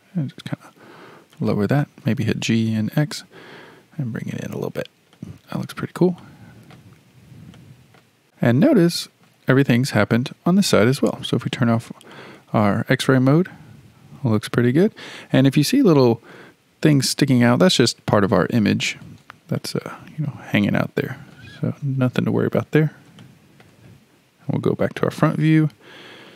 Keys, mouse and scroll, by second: 2.0 g, 5.1-7.2 shift+middle drag, 7.2-7.5 scroll down 2, 7.5 shift+middle click, 8.3-8.8 scroll down 5, 8.8-11.3 shift+middle drag, 11.3 alt+z, 12.1-15.2 middle drag, 15.6-15.9 scroll up 3, 15.9-18.9 shift+middle drag, 19.1 alt+z, 19.6-24.4 middle drag, 24.4 KP_1, 25.3-26.3 shift+middle drag.